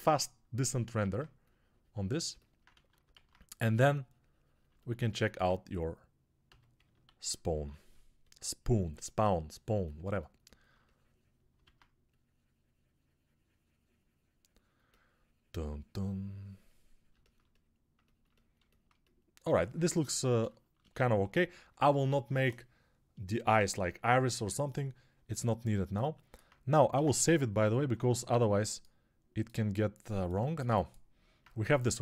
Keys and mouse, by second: 0.9 alt+q, 2.6 ctrl+z, 3.0 alt+q, 6.3 s, 7.0 alt+q, 11.8 alt+q, 27.1 ctrl+s.